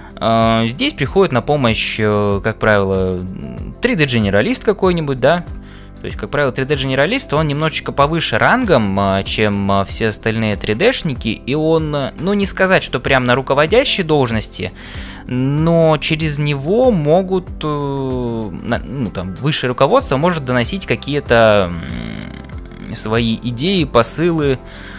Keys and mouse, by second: 5.6 shift+click, 5.7 shift+middle click, 7.4-8.7 drag, 11.0 e, 12.8 middle click, 13.3 middle click, 14.6 click, 15.9 g, 17.9 shift+middle click, 23.1 click, 24.6 f.